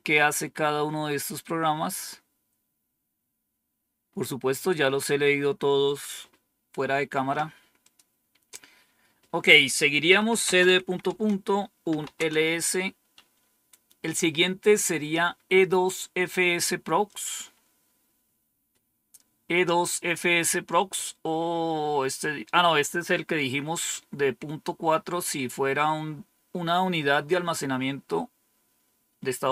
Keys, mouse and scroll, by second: 0.5-1.3 scroll down 1, 1.4-1.9 scroll down 2, 1.9-2.6 scroll down 1, 2.6-4.5 scroll down 5, 5.3 scroll down 2, 6.1 scroll down 2, 7.7 click, 9.8-12.4 typing, 17.0 click, 27.6 scroll up 2.